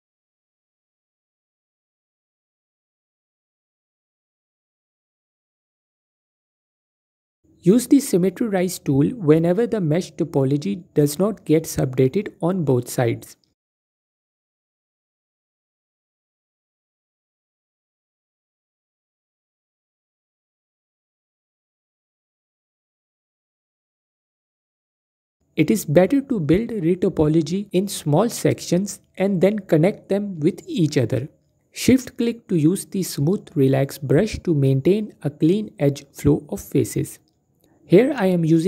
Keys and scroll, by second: 0.1 typing, 1.5-1.9 typing, 4.4 typing, 5.7-6.9 typing, 8.5 typing, 10.7 typing, 12.3 q, 15.2 ctrl+r, 16.7 typing, 19.1 typing, 20.1 a, 22.8 q, 23.9 typing, 27.0 typing, 29.0-29.6 typing, 31.5 typing, 33.3 typing, 34.4 typing.